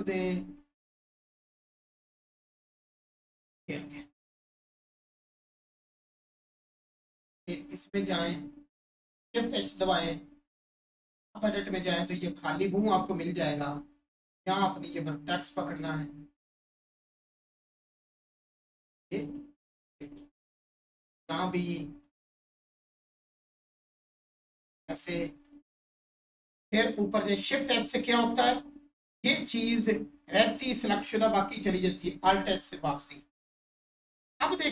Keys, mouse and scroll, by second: 1.6 click, 3.0-3.6 scroll down 1, 7.1 click, 11.3 Tab, 11.9-13.8 scroll up 1, 14.4 click, 19.6 click, 20.0 3, 22.0 click, 24.5 click, 25.0 1, 26.9 click, 27.8-28.5 scroll down 1.